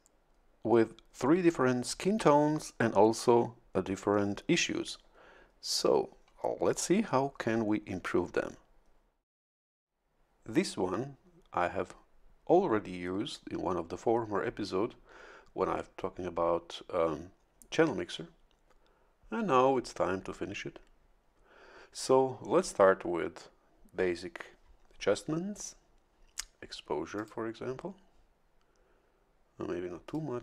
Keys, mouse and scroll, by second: 27.2 click, 30.0 click.